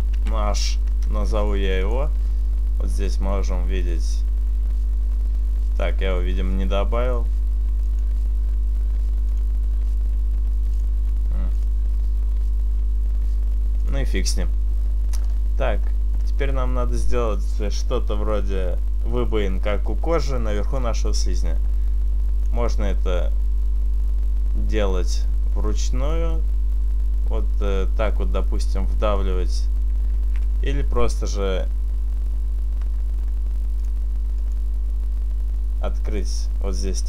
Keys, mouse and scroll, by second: 2.2 click, 9.5 click, 11.0 click, 11.8 click, 15.6-16.9 scroll up 4, 21.7 click, 25.8 Left, 30.9 ctrl+z, 31.9-32.8 scroll down 1, 32.8-34.2 scroll down 1, 34.2 click, 34.7 click.